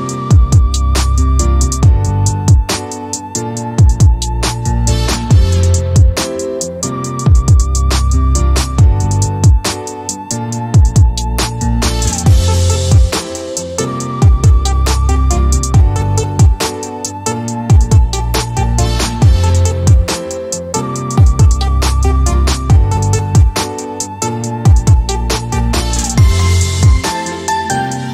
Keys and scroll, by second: 1.4-2.1 typing, 5.6-6.5 typing, 10.6 Escape, 20.0 d, 23.9-24.8 typing.